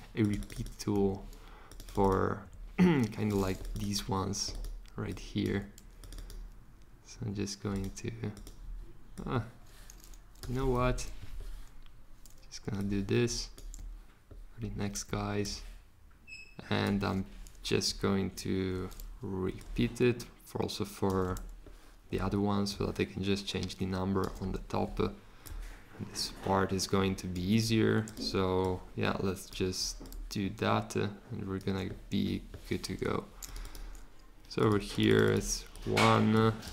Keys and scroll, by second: 0.9 8, 2.4 9, 10.9 BackSpace, 36.6 1.